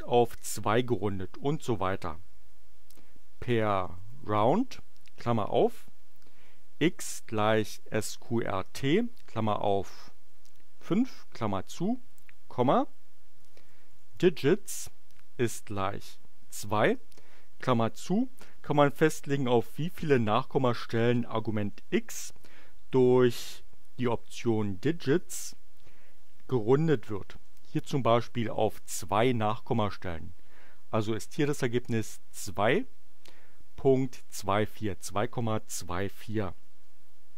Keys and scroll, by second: 3.1-5.0 typing, 6.3-9.0 typing, 10.6 5, 11.3 shift+9, 12.1 ,, 13.4-15.1 typing, 16.2 2, 17.1 shift+9, 27.4 Return.